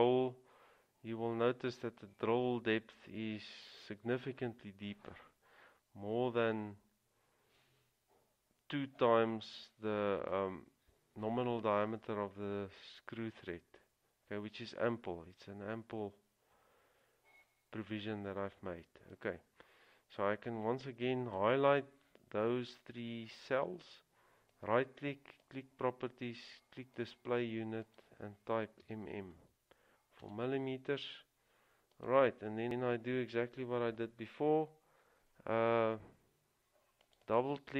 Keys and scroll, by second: 29.0 typing, 30.5 Return.